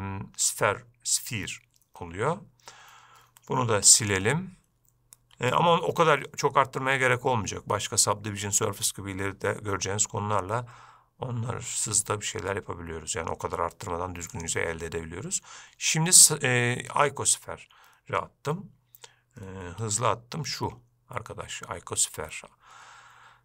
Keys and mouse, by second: 0.0-0.7 middle drag, 4.0 x, 5.6 shift+a, 20.1 shift+a.